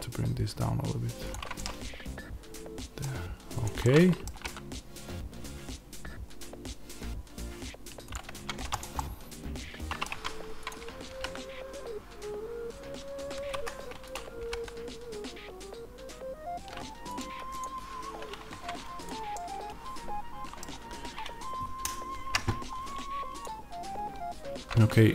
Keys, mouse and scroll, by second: 1.2 click, 3.5 click, 3.7-8.2 middle drag, 4.2 g, 8.0 click, 8.2 Tab, 8.7 click, 8.9-10.6 middle drag, 10.0 Tab, 10.6 click, 11.0 g, 13.5 Escape, 14.0 click, 14.3 g, 17.1 click, 18.4 Tab, 19.2-23.3 middle drag, 22.6-23.3 scroll up 2, 23.3 click.